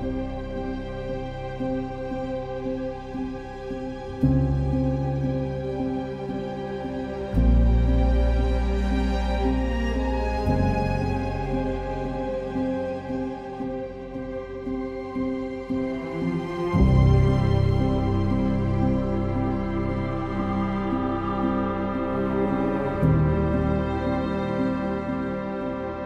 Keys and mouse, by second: 1.0 ctrl+r, 1.2 ctrl+click, 1.3 right click, 1.7 ctrl+r, 1.9 click, 2.5 ctrl+KP_Add, 3.9 click, 4.9 s, 5.5 click, 6.7 g, 9.3 click, 10.7 i, 11.6 q, 12.7 1, 13.6 middle click, 15.4 ctrl+KP_Add, 15.5 ctrl+KP_Add, 16.1-18.4 typing, 17.5 alt+click, 19.6 2, 20.7 ctrl+b, 23.3 click, 24.0 1, 24.7 ctrl+KP_Add, 25.6 shift+d, 25.9 Escape.